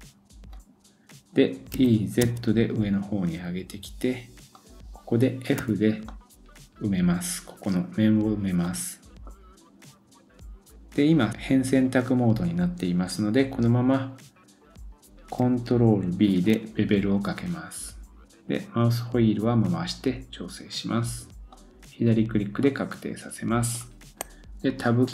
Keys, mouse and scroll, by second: 6.1-8.6 middle drag, 16.3 ctrl+b, 22.3-22.6 scroll down 1, 22.6 middle click, 25.0 Tab.